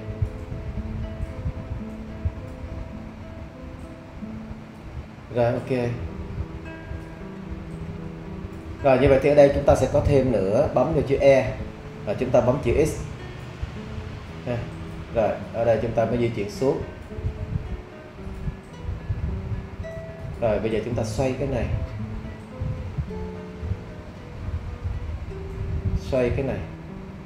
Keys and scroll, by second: 11.5 e, 13.4 x.